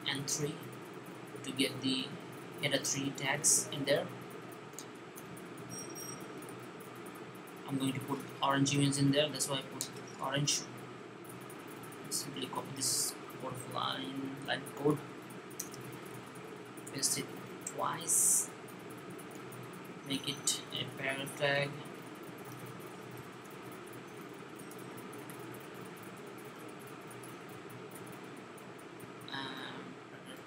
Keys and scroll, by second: 4.4-6.9 typing, 14.3 super+c, 16.0 v, 20.0 p, 23.0 p, 27.4-27.8 typing, 29.9-30.4 typing.